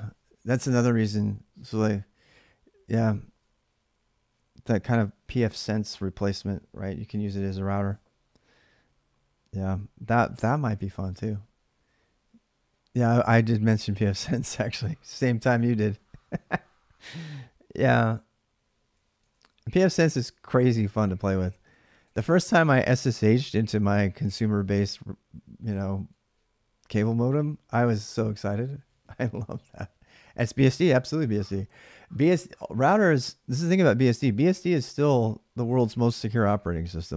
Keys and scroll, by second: 19.1 ctrl+a, 19.4 ctrl+a.